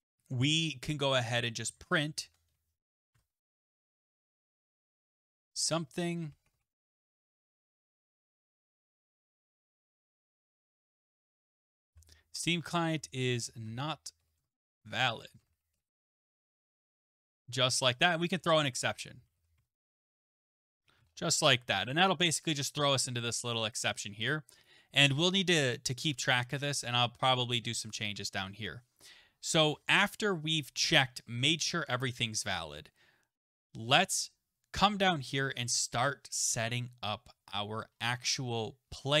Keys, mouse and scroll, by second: 1.5-22.1 typing, 3.1 Tab, 23.7 click, 24.6 click, 24.6 typing, 27.9 click, 30.5-31.7 typing, 34.2 Return, 37.9-39.2 scroll.